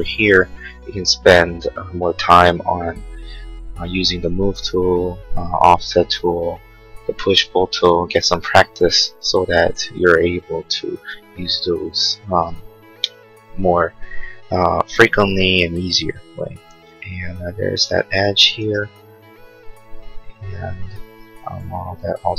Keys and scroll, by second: 18.7 r, 20.4 Escape.